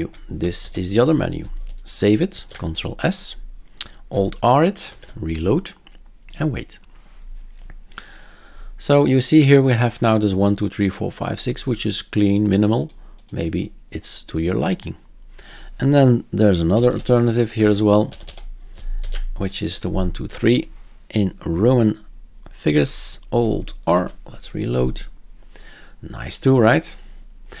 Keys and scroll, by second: 0.4 BackSpace, 0.6 BackSpace, 2.3 ctrl+s, 4.9 alt+r, 16.7 typing, 17.6 Down, 18.1 BackSpace, 18.2 BackSpace, 19.0 ctrl+s, 23.8 alt+r.